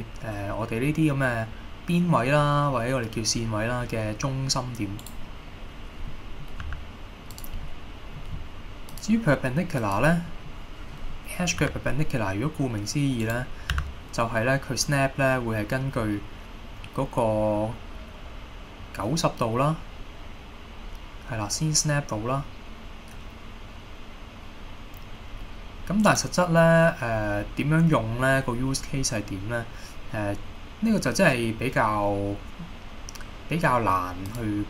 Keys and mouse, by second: 5.1 right click, 6.2 middle click, 6.7 g, 7.4 click, 7.8 middle click, 9.2-10.3 drag, 10.6-11.1 middle drag, 11.7 g, 13.3 right click, 13.8 g, 26.2 right click, 26.7-28.5 middle drag, 34.5-34.6 drag.